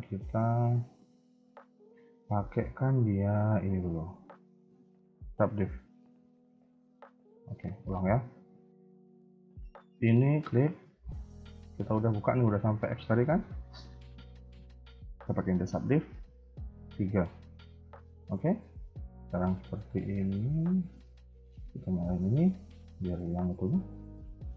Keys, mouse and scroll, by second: 0.9 KP_3, 1.6 Tab, 1.8 KP_1, 3.3 click, 4.7 click, 5.7 middle click, 7.7 click, 8.4 KP_1, 9.3 a, 9.4 a, 9.8 click, 13.1-14.0 scroll up 1, 14.0 click, 18.4 click, 18.4 KP_3, 18.9 Tab, 19.3 shift+middle click, 20.0-20.5 scroll up 1, 22.0 click, 22.7 shift+middle click, 23.0 scroll up 2, 23.5 alt+click, 24.1 shift+middle click.